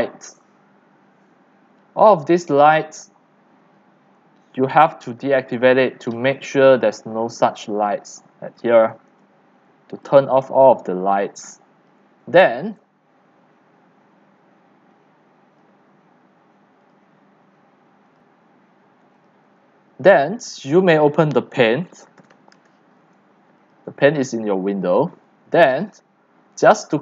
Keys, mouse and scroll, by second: 1.0 drag, 1.5 click, 4.5 click, 5.3 click, 6.1 click, 7.4 click, 8.1-9.3 drag, 9.2 c, 9.9 c, 10.1 click, 10.9 x, 11.1 click, 11.4 c, 12.0 click, 12.8 drag, 14.0 click, 15.0-17.7 drag, 20.0 click, 20.9 click, 21.7-22.9 typing, 23.8-25.2 drag.